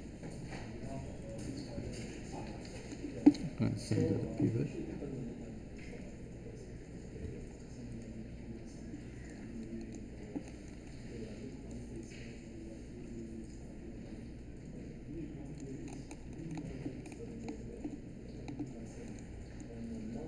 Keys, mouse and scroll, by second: 9.1 space.